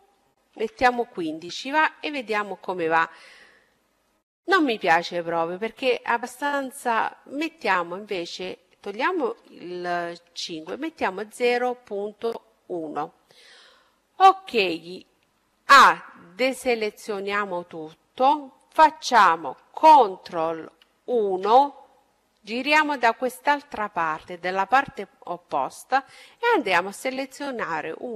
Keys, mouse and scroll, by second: 0.5 KP_Enter, 2.6 middle click, 3.5 middle click, 3.7 middle click, 3.9 middle click, 4.0 middle click, 5.1-6.7 middle drag, 6.5-8.1 drag, 11.5-15.1 middle drag, 14.6 a, 19.6 ctrl+KP_1, 22.8-24.7 middle drag, 25.1-28.1 right drag.